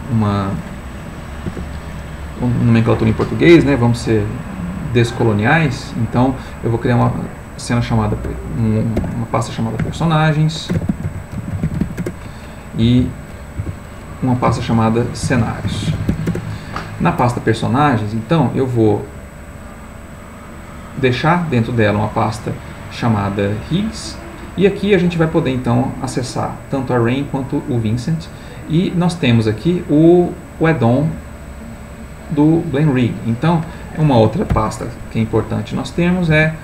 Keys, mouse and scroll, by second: 1.5 BackSpace, 9.0-11.8 typing, 12.0 Return, 12.8 Down, 13.6 F2, 14.6-16.1 typing, 16.3 Return, 19.0 click, 20.1 click, 20.7 click, 21.8 click, 23.6 click, 24.5 click, 28.6 click, 29.8-32.2 drag, 32.8 click, 34.5 ctrl+shift+n, 36.3 a.